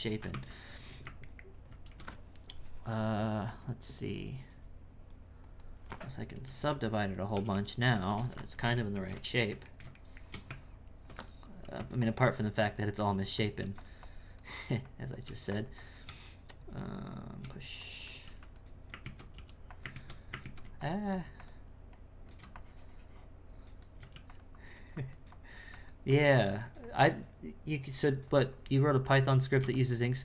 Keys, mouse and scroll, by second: 0.3 Tab, 1.3 ctrl+middle click, 1.8 a, 3.5-6.5 drag, 7.3 shift+r, 7.5 shift+r, 8.6-10.5 ctrl+middle drag, 10.5 Tab, 12.0-13.6 drag, 14.0-15.2 drag, 15.8 click, 16.0 space, 17.8 click, 19.0 ctrl+z, 19.9 ctrl+z, 20.4 ctrl+z, 20.8-24.1 drag, 24.5-30.2 drag.